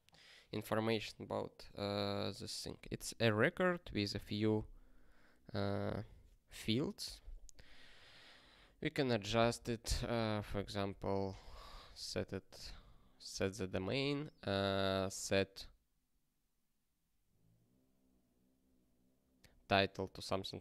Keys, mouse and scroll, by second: 8.5 click, 9.3 ctrl+b, 9.8 alt+d, 10.0 alt+d, 10.1-12.1 typing, 12.5 ctrl+p, 13.6 alt+b, 13.8 alt+b.